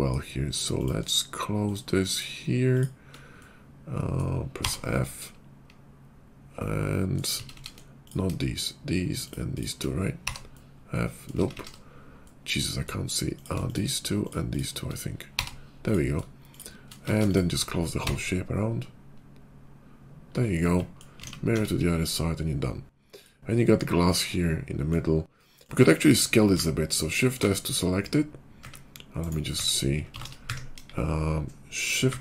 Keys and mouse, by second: 2.1 shift+click, 4.5 f, 7.3 ctrl+z, 7.4 ctrl+z, 7.6 middle click, 8.4 shift+click, 10.1 f, 11.5 ctrl+z, 13.3 click, 14.1 shift+click, 15.3 f, 16.4 shift+click, 17.1 ctrl+z, 17.8 f, 18.3-20.2 f, 19.1 click, 19.4-20.4 drag, 20.4-23.0 middle drag, 21.1 alt+x, 21.5 Tab, 21.9 /, 23.0 click, 23.1-29.2 middle drag, 26.4 shift+s, 30.7 KP_5, 32.0 shift+s.